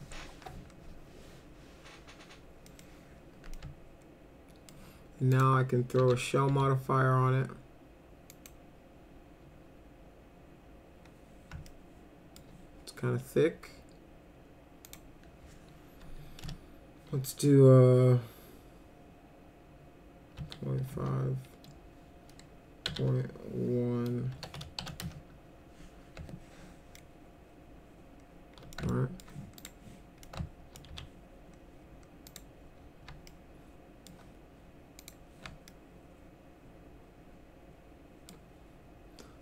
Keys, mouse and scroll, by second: 2.7 middle click, 3.6-4.7 alt+middle drag, 5.4 click, 6.0 s, 6.5 s, 8.3 click, 11.7 alt+middle click, 14.9 click, 16.5 BackSpace, 20.4 ., 20.8 5, 21.0 Return, 22.9 ., 24.3 1, 24.8 shift+', 26.9-28.7 alt+middle drag, 28.9 alt+middle click, 29.6 click, 30.2 alt+middle click, 30.9 z, 32.3 click, 33.3 alt+middle click, 35.0 click, 35.7-38.3 alt+middle drag.